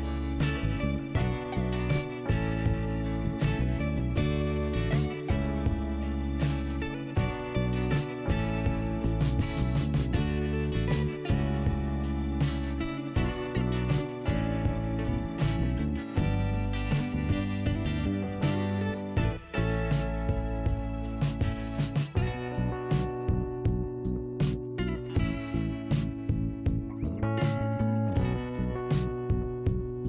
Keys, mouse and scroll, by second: 0.2 click, 1.3 click, 2.0-2.4 scroll down 1, 2.4 click, 3.8 l, 5.0 click, 6.3 click, 7.4 click, 9.2 click, 9.3 click, 10.5 click, 12.2 click, 13.6 click, 13.6 5, 16.2 scroll down 2, 17.5 click, 18.1 click, 19.0 click, 19.7 click, 21.2 click, 23.0 scroll down 2, 24.0 click, 26.8 click, 28.0 i, 29.5 click.